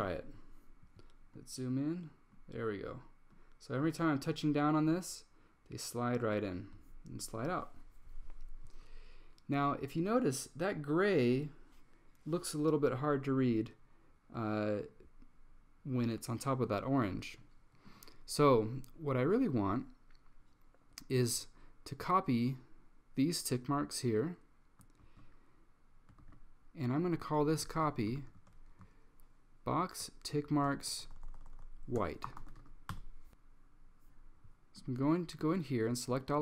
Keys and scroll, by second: 25.1 super+c, 26.3 super+v, 27.9 Down, 30.8-31.5 typing.